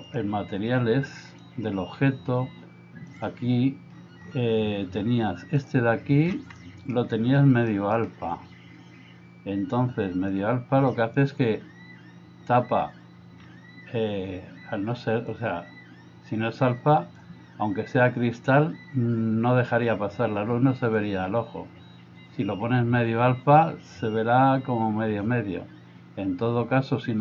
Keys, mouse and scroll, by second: 0.1-1.5 drag, 3.1 click, 5.6 click, 6.7 middle click, 7.8 middle click, 10.4 click, 15.4 click, 21.0-27.2 drag.